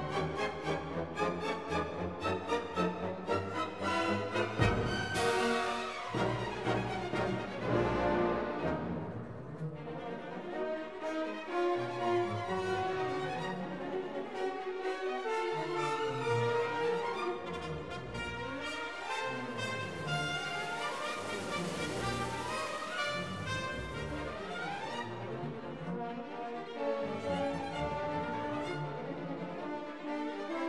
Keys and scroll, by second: 0.8 BackSpace, 0.9 4, 1.4 Return, 2.5 3, 2.6 5, 2.9 Return, 13.9 8, 14.1 0, 14.2 Return, 15.4 8, 15.5 0, 15.6 Return, 22.8 BackSpace, 23.2 7, 23.3 Return, 29.0 BackSpace, 29.2 0, 29.4 8, 29.5 Return.